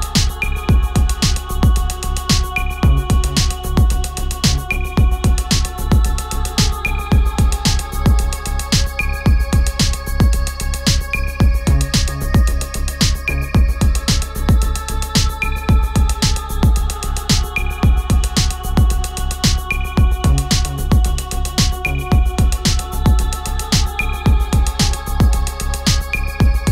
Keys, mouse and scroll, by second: 1.6 space, 2.2 click, 3.6 shift+space, 5.0-7.8 typing, 9.5-16.5 drag, 21.3-25.5 drag, 25.8 click, 26.5 ctrl+a.